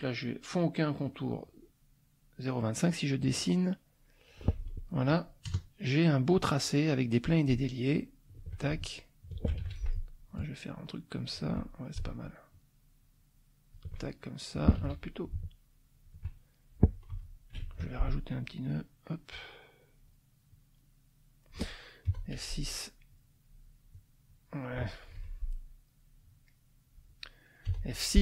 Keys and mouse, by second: 3.2 click, 5.5 KP_Add, 6.2 click, 7.9 shift+click, 9.6 ctrl+shift+z, 10.3-11.6 shift+drag, 12.5-13.9 shift+drag, 14.8 ctrl+z, 15.2-16.2 ctrl+shift+drag, 15.3 ctrl+shift+z, 17.1 F2, 17.6 ctrl+alt+click, 18.4 click, 19.3 click, 20.5-21.7 drag, 22.1 F6, 23.1-24.1 drag, 24.6 middle click, 25.1 F2, 25.5-26.7 drag, 26.7 middle click, 27.5 click, 27.7 F6.